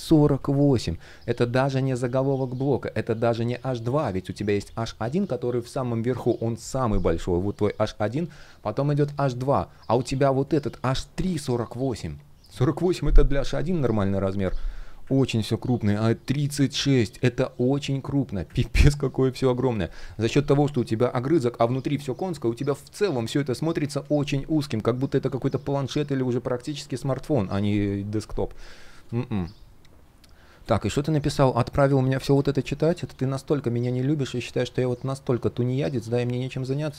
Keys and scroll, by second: 32.1 super+\.